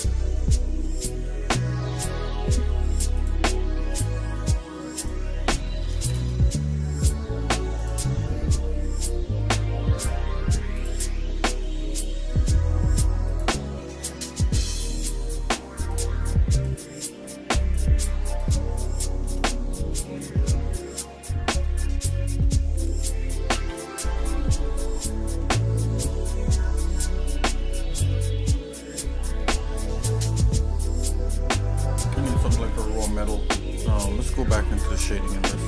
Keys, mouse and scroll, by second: 1.1 middle click, 1.9-2.7 scroll up 3, 3.2 click, 5.3 click, 7.8 click, 10.8 click, 11.4-11.9 scroll down 2, 12.0 middle click, 13.5 click, 18.5 click, 19.0 shift+middle click, 19.5 middle click, 20.2 middle click, 21.0 middle click, 21.7 shift+middle click, 23.6 ctrl+s, 24.2 middle click, 25.0 shift+middle click, 25.9 middle click, 27.6 shift+middle click, 28.4 middle click, 29.0 middle click, 29.9 shift+middle click, 33.8 click.